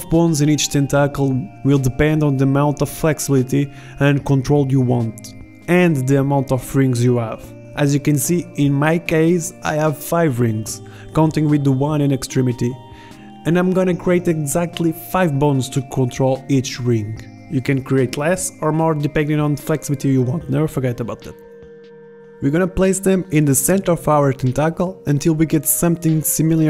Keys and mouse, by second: 2.2 e, 4.4-6.2 drag, 5.0 e, 6.2 e, 10.7 KP_1, 11.9 KP_3, 13.6 click, 15.5 click, 16.7 right click, 18.4-19.9 drag, 21.9-23.5 middle drag, 25.1 right click.